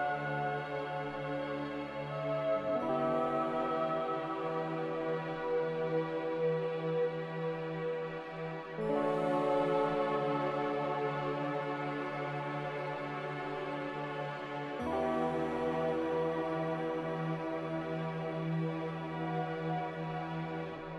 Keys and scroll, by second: 10.7 Return.